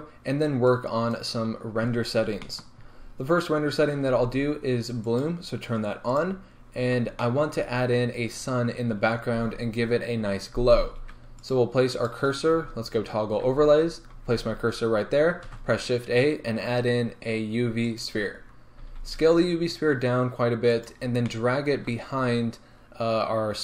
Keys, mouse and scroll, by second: 2.0 scroll down 2, 2.5-5.1 shift+middle drag, 2.9-4.1 scroll up 2, 4.1 a, 5.1 click, 7.2-11.5 shift+middle drag, 7.6-11.5 scroll up 2, 11.5 click, 13.5 z, 18.0 shift+a, 18.8 s, 21.0 click, 21.2-23.6 middle drag, 22.2-23.6 scroll down 2.